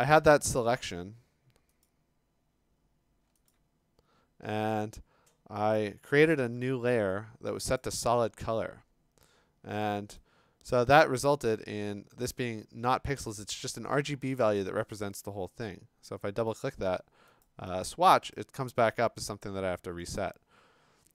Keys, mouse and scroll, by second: 0.9 ctrl+click, 1.9 click, 3.5 ctrl+click, 5.8 click, 7.8 click, 12.3 click, 13.4 click, 15.0 click, 15.2 click, 16.7 click, 17.4 click, 17.9 click, 18.4 click, 18.9 click, 20.2 click.